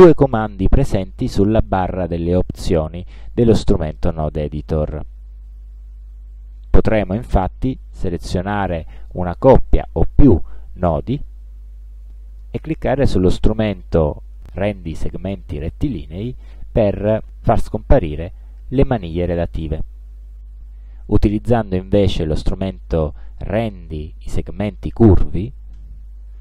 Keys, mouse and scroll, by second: 7.3 click, 16.3 click, 25.9 click.